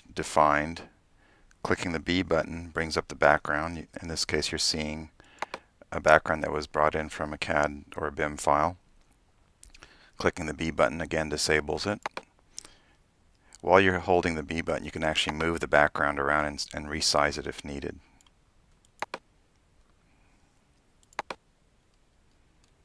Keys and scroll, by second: 2.2-5.1 typing, 9.0 x, 10.5-11.4 typing, 12.7 b, 13.3 b, 14.7 b, 20.7 b.